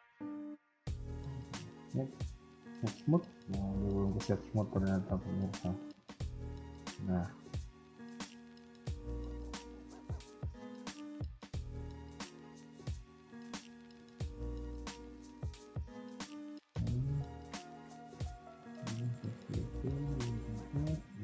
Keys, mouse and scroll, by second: 1.3 click, 2.9 middle click, 4.0 KP_1, 4.4 middle click, 5.1 KP_3, 5.5 scroll down 1, 6.2 scroll down 3, 6.4 shift+middle click, 6.6 scroll up 1, 8.5 KP_1, 9.0 z, 9.9-10.4 scroll up 2, 10.6 shift+middle click, 12.6 click, 13.1 click, 13.6 scroll down 2, 13.9 middle click, 14.9 KP_1, 15.2-15.6 scroll down 2, 16.1 scroll down 2, 16.2 s, 17.3-17.9 scroll up 5, 18.0 middle click, 18.9 Tab, 19.3-19.7 scroll up 2, 19.6 KP_1, 20.5 click, 20.9 middle click.